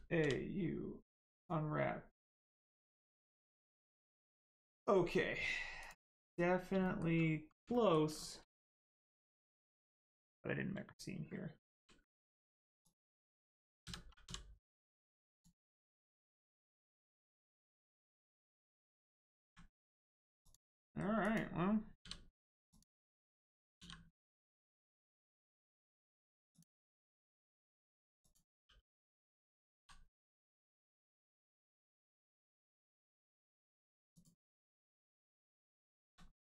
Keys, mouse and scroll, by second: 1.3 click, 5.8 click, 6.3 scroll up 1, 6.8 shift+middle click, 7.1-7.5 scroll up 1, 7.6 shift+middle click, 11.7 ctrl+e, 12.8 click, 13.8 a, 15.2 click, 16.5-17.3 scroll down 1, 17.5 shift+middle click, 18.2 click, 18.6 click, 19.8 scroll down 1, 20.4 click, 20.8 shift+middle click, 21.2 click, 21.2 click, 22.0 l, 22.6 click, 23.7 l, 26.5 click, 29.7 g, 30.5 click, 30.9 shift+middle click, 31.5 scroll up 1, 31.8 shift+middle click, 32.1-32.5 scroll down 1, 32.5 middle click, 33.0 shift+middle click, 34.1 middle click, 34.7-35.1 scroll up 1, 35.5 click, 35.9 shift+middle click, 36.2 scroll up 1.